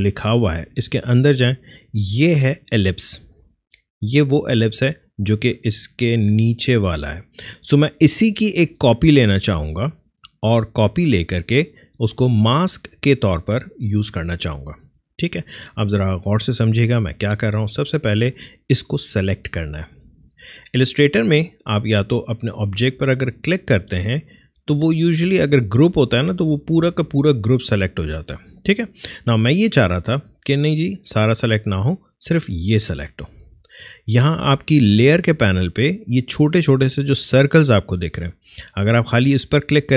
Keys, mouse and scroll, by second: 0.3 click, 23.5 click, 26.6 click, 30.1 click.